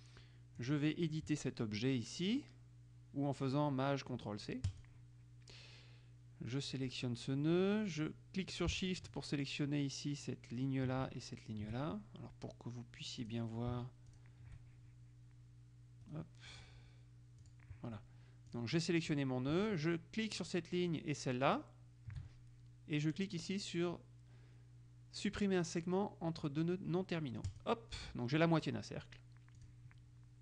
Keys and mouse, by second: 0.8 click, 4.9 click, 6.8 click, 9.2 shift+click, 13.4 click, 14.3 shift+click, 16.2 right click, 17.5 click, 18.6 click, 20.5 shift+click, 21.6 click, 27.6 click, 29.8 click.